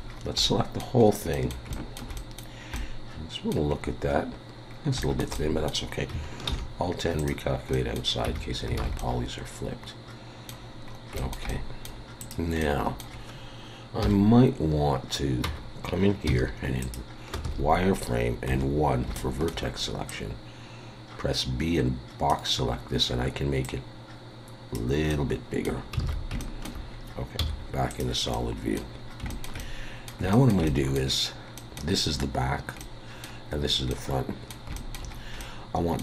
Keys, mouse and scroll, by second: 0.1-0.4 scroll down 3, 0.4 middle click, 1.0-1.4 scroll up 3, 1.3 middle click, 1.7 shift+middle click, 2.1 middle click, 2.7 middle click, 2.9 shift+middle click, 3.7-4.2 scroll up 3, 4.7 scroll down 2, 5.0 shift+middle click, 5.3 middle click, 6.5 alt+n, 7.7 middle click, 8.3 Tab, 8.8 alt+a, 9.0 middle click, 10.9 scroll up 2, 11.2 shift+middle click, 11.5 middle click, 12.2 click, 12.6 middle click, 14.0 KP_7, 15.4 Tab, 16.3 z, 17.5 alt+a, 18.5 1, 19.2 shift+middle click, 20.1 click, 22.8-23.6 scroll up 2, 23.6 click, 25.1 middle click, 26.0 alt+a, 26.4 shift+middle click, 27.4 z, 28.3 middle click, 29.0 scroll down 2, 29.3 shift+middle click, 29.6 middle click, 30.3 shift+middle click, 30.7 middle click, 31.5 middle click, 31.7 shift+middle click, 33.9 middle click, 34.7 shift+middle click, 35.1-35.5 scroll up 2, 35.4 middle click.